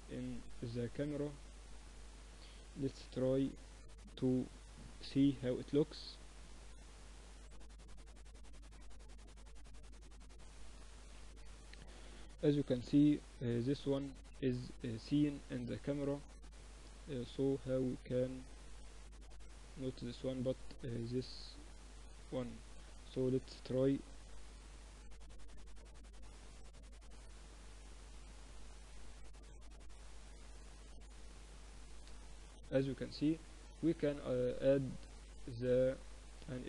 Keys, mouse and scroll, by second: 1.0-2.5 middle drag, 2.0 KP_0, 3.0 shift+z, 11.2 z, 12.0 KP_0, 13.2-15.0 middle drag, 16.6-19.2 middle drag, 19.2-22.9 drag, 20.0-21.0 right drag, 22.2 KP_0, 22.9 shift+z, 32.1 z, 33.3-34.8 drag, 35.2 click.